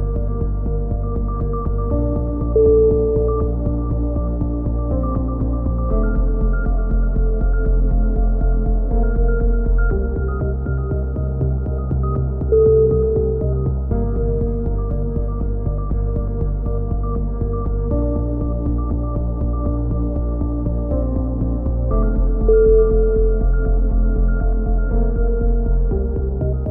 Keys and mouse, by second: 2.3-3.3 middle drag, 3.3-4.8 drag, 4.8 middle click, 5.2 click, 6.3 a, 6.4-8.5 middle drag, 8.4 k, 8.5 click, 10.7 right click, 11.2 click, 12.4 right click, 12.9 click, 13.5 a, 14.3-15.3 middle drag, 15.0 click, 15.3 right click, 15.4 click, 15.9 middle click, 16.1 right click, 17.5 a, 17.9 middle click, 18.7 right click, 20.4-22.3 middle drag, 22.6 ctrl+r, 24.1 a, 24.5 middle click, 24.9-26.5 drag, 25.5 right click.